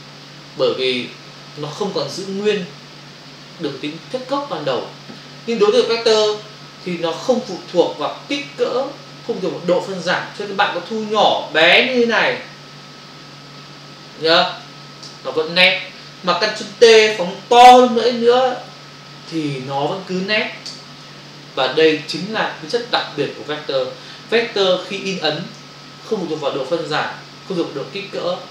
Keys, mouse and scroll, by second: 1.1 click, 6.2 ctrl+click, 6.9 click, 11.2 alt+click, 15.0 Return, 17.6 alt+click, 20.7 Return.